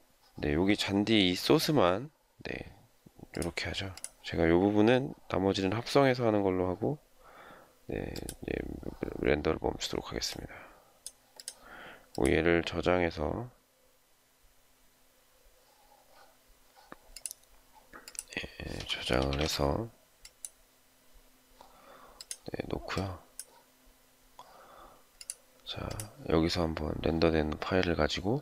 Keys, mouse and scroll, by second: 20.2-21.0 typing.